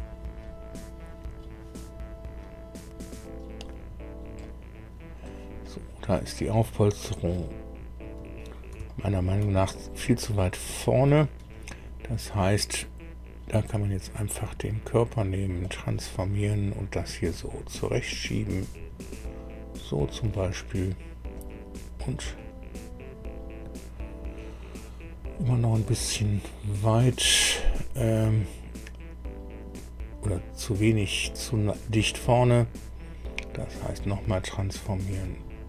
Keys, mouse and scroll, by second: 4.4-5.4 middle drag, 5.6 middle click, 6.6 middle click, 8.8 shift+middle click, 9.6 shift+middle click, 9.6 shift+click, 10.4 middle click, 12.9 scroll down 1, 14.3 right click, 15.6 click, 17.2-20.3 drag, 21.3 click, 25.8 right click, 33.8 click, 35.0-35.6 drag.